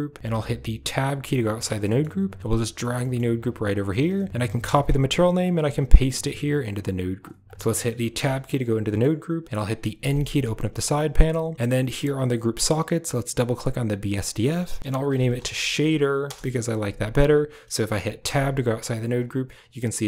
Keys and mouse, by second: 0.8 Tab, 1.7 click, 2.4 g, 2.9 click, 3.3 g, 4.3 ctrl+click, 5.3 ctrl+click, 6.4 click, 7.3 click, 8.0 Tab, 8.7 click, 9.8 n, 13.3 click, 13.5-16.2 drag, 18.1 Tab.